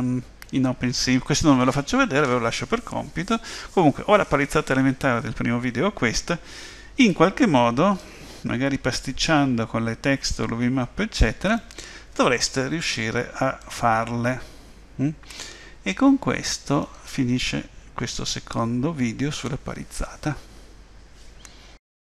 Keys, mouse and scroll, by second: 8.0 middle click, 13.6 middle click.